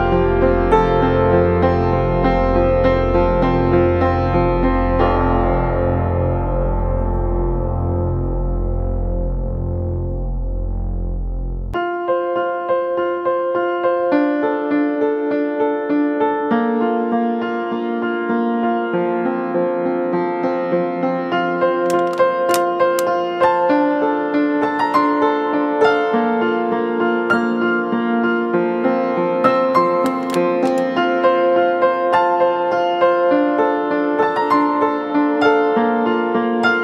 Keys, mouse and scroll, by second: 25.8 ctrl+click, 27.8 alt+scroll up 1, 28.6-29.0 alt+scroll down 1, 29.0 alt+scroll up 1, 29.7 space, 33.6 space, 36.2-36.5 alt+scroll down 1.